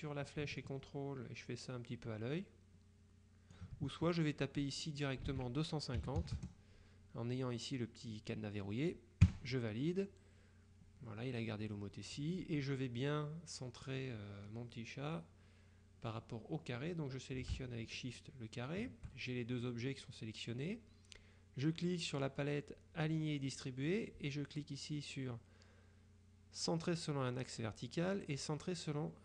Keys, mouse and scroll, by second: 0.7-4.2 ctrl+drag, 4.8 click, 5.4 ctrl+a, 6.1 KP_2, 6.5 KP_0, 9.4 KP_Enter, 18.2 shift+click, 23.4 click.